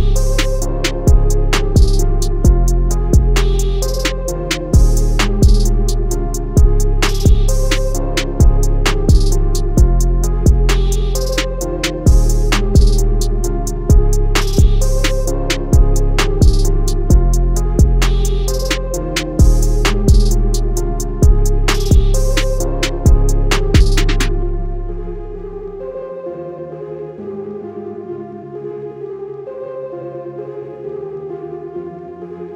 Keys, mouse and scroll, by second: 8.3 click, 9.1 a, 9.5 click, 11.1 i, 12.7 click, 15.5 a, 15.6 click, 20.3 a, 20.6 click, 22.7 i, 23.5 click, 27.4 click, 30.3 click.